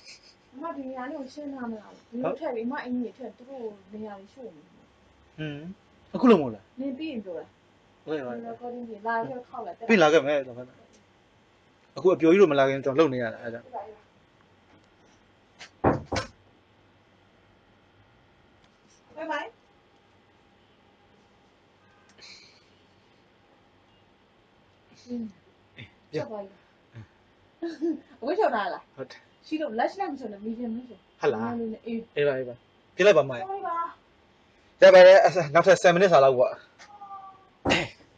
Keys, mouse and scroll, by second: 13.9-18.5 drag, 18.5 s.